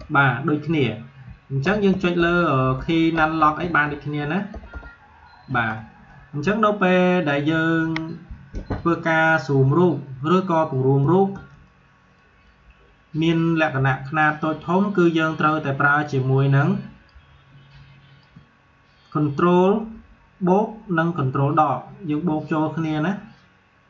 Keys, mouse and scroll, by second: 11.3 space, 11.6-17.6 alt+drag, 17.6-23.0 drag.